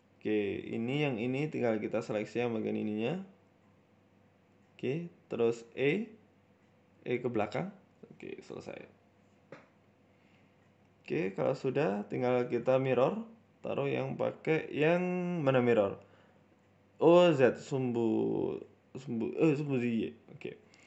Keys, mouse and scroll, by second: 0.2 middle click, 0.4 shift+middle click, 0.4 scroll up 1, 0.8 right click, 1.0 Tab, 1.4 right click, 1.9 shift+right click, 4.6 e, 5.6 g, 6.9 Tab, 7.1 middle click, 7.6 scroll down 2, 7.7 middle click, 8.1 middle click, 8.4 scroll down 2, 8.6 middle click, 9.2 KP_1, 9.7-10.5 scroll up 5, 9.8 middle click, 10.4 right click, 10.6 middle click, 11.2 click, 11.9-13.4 scroll down 9, 13.8 scroll down 3, 15.0 scroll down 13, 15.8 click, 16.5 click, 16.6 click, 17.3 click, 17.5 middle click, 18.0 middle click, 18.2-18.7 scroll up 3, 18.6 right click, 19.4 click, 20.7 click.